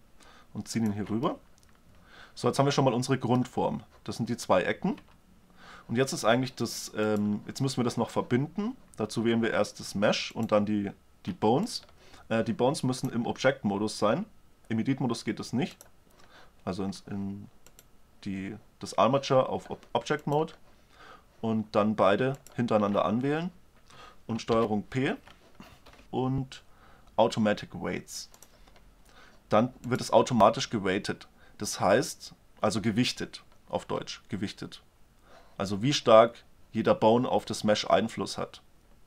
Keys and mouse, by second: 1.4-3.1 middle drag, 5.1 Tab, 7.2-8.4 drag, 8.4-9.2 right drag, 10.4-13.1 right drag, 13.6 click, 13.8 click, 14.0 click, 17.8-19.6 drag, 20.3-22.1 drag, 22.4-24.2 drag, 24.6 ctrl+p, 26.0 ctrl+p, 29.9-31.6 drag.